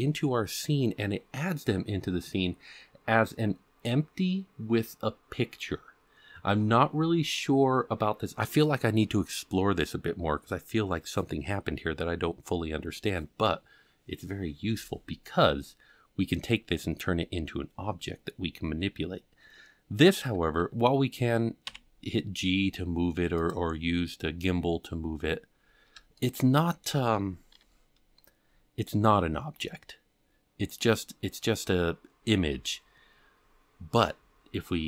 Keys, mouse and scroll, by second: 21.6 g, 25.6-25.9 scroll up 4, 26.1-26.8 shift+middle drag, 27.5 KP_Decimal, 28.4-28.8 scroll up 4, 31.0-31.6 middle drag, 32.5 KP_7.